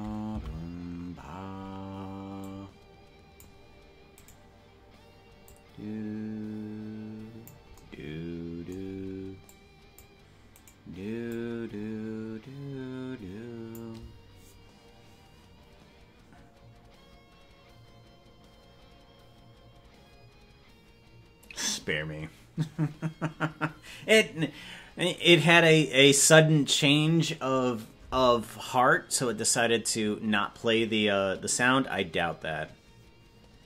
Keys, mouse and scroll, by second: 0.4 Right, 2.4-3.4 drag, 4.3 right click, 5.4-7.5 drag, 9.4 click, 10.6 right click, 11.3-13.8 drag.